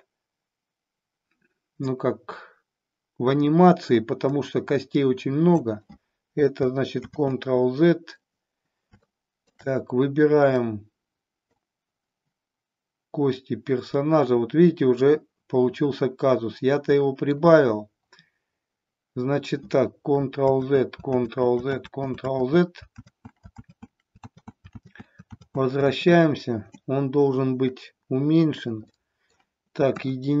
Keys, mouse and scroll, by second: 4.2-5.9 drag, 7.5 ctrl+z, 9.0-9.6 shift+middle drag, 10.6-11.6 drag, 15.1-17.5 middle drag, 20.8 ctrl+z, 21.6 ctrl+z, 22.1 ctrl+z, 22.7 ctrl+z, 23.4 ctrl+z, 24.0 ctrl+z, 25.4 ctrl+z, 25.9 ctrl+z, 26.5 ctrl+z, 29.0 middle click, 30.1 KP_1.